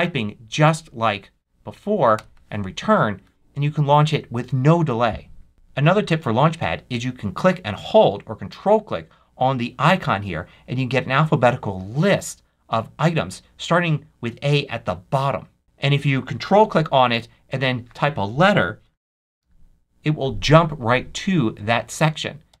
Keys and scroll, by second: 0.6 c, 2.1 Return, 19.3 c, 22.4 Down.